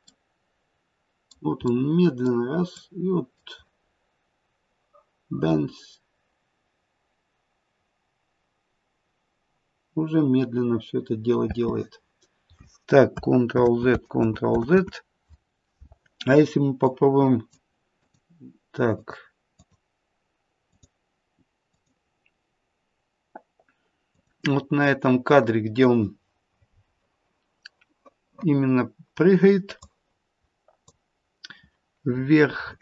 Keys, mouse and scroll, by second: 0.0 middle click, 1.6 middle click, 2.7 middle click, 11.5 space, 13.6 ctrl+z, 14.1 ctrl+z, 16.8 ctrl+z, 16.8 click, 18.1 click, 24.1 click, 29.8 click, 32.1-32.8 scroll up 12.